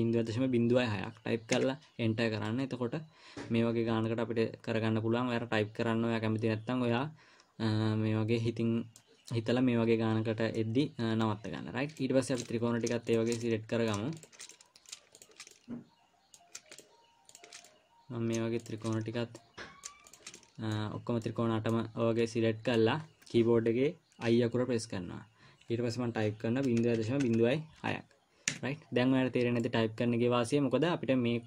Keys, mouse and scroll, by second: 2.8 middle click, 5.8 i, 10.9 middle click, 12.7 click, 13.5 shift+click, 13.8 middle click, 14.5 shift+click, 14.9 middle click, 15.5 shift+click, 15.9 middle click, 17.1 shift+click, 17.7 shift+click, 18.1 middle click, 19.0 shift+click, 19.8 middle click, 20.5 shift+click, 20.8 middle click, 21.3-21.6 scroll down 3, 21.6 middle click, 22.4 scroll down 1, 22.6 middle click, 23.1-24.3 scroll up 3, 24.7 i, 29.5 scroll up 2, 30.0 middle click.